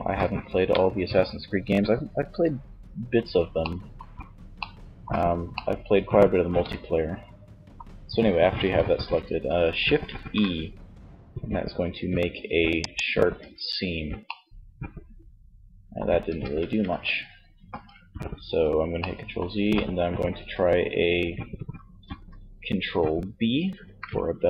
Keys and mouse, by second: 9.2 shift+e, 12.5 Tab, 13.4 middle click, 15.4 Tab, 15.9 ctrl+z, 16.7 ctrl+z, 23.0 ctrl+b.